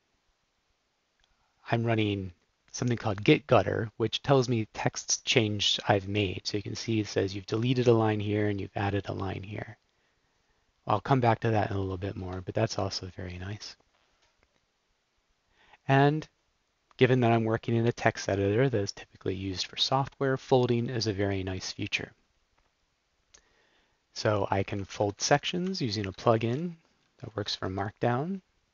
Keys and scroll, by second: 11.8 super+z, 12.2 super+z, 24.7 Up, 24.8 Up, 25.0 Up, 25.2 Up, 25.3 Up, 26.0 shift+Tab, 26.8 Down, 27.4 shift+Tab.